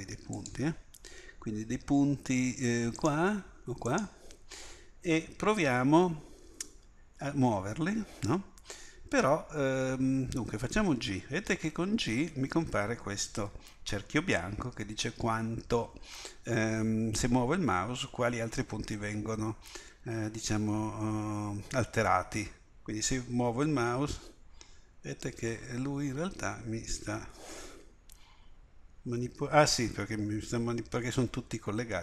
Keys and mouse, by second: 11.0 g.